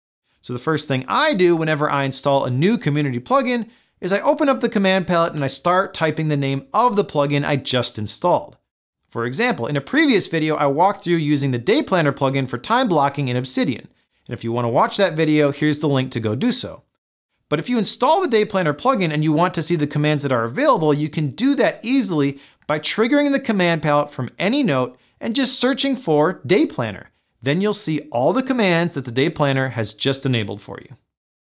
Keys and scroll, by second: 23.2 super+p.